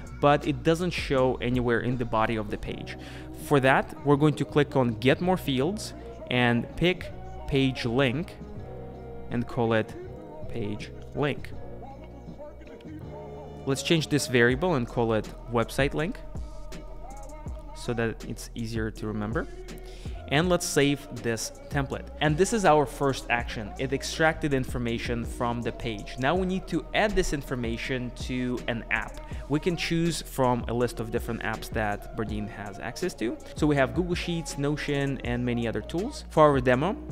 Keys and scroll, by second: 10.6 super+a, 16.4 super+Left.